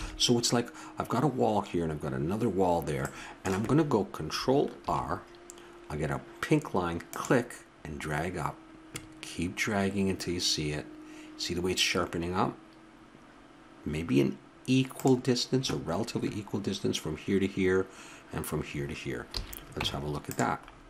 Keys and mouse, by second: 0.0 a, 3.0-5.3 middle drag, 4.8 ctrl+r, 19.3 a, 19.8 Tab, 20.7 middle click.